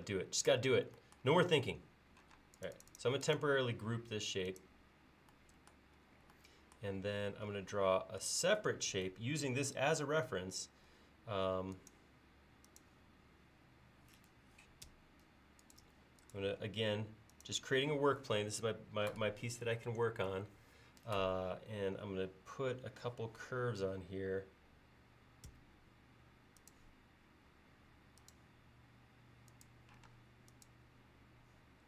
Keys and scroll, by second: 1.6 l, 6.0 |, 11.0 l, 25.6 a, 30.1 space.